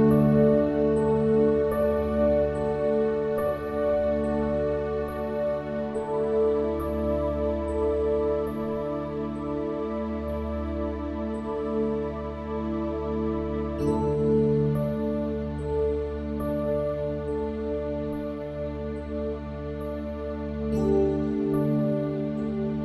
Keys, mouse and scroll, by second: 0.1 z, 0.3 Tab, 0.3 z, 0.7 Tab, 1.6 ctrl+r, 2.4 s, 4.9 ctrl+r, 5.9 middle click, 6.7 ctrl+r, 8.5 click, 9.1 s, 10.3 middle click, 10.9-12.2 drag, 12.3 Tab, 12.6 Tab, 13.1 KP_1, 14.1 click, 14.6 x, 15.6 click, 16.1 KP_1, 16.6 e, 17.6 s, 19.0 middle click, 19.0 KP_1, 19.8 w, 21.1 x, 22.7 w.